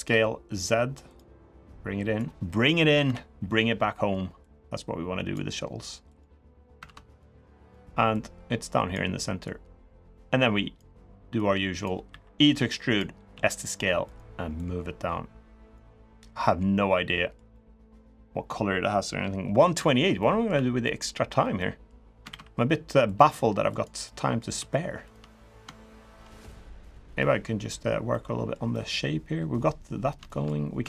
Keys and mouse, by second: 1.4 click, 2.8 KP_3, 4.2 click, 5.9 click, 6.6 ctrl+z, 7.0 click, 7.9 click, 9.2-10.5 drag, 11.1 click, 11.8 e, 13.1 s, 14.3-15.5 drag, 16.2 middle click, 17.3 middle click, 19.6 shift+middle click, 19.9 middle click, 20.3 3, 20.6 middle click, 21.3 middle click, 22.0 ctrl+r, 23.8 middle click, 24.3 3, 24.8 shift+click, 25.8 shift+click, 26.5 click, 27.8 middle click, 28.5-29.6 middle drag, 30.0 shift+middle click.